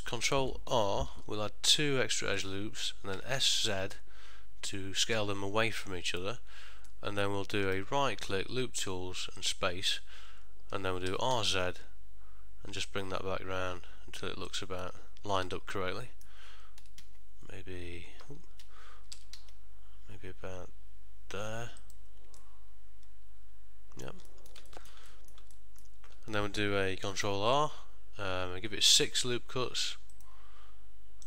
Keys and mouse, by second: 1.2 ctrl+r, 7.0 middle click, 7.8 right click, 14.9 middle click, 16.9 s, 22.5 middle click, 24.4 ctrl+middle click, 24.8 shift+middle click, 25.2 middle click, 25.7 ctrl+middle click, 27.3 ctrl+r.